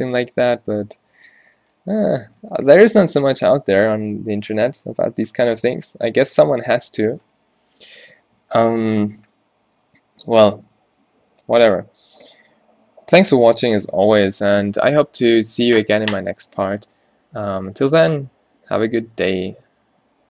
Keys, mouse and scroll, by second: 4.9 Tab, 5.5 Tab, 8.9 middle click.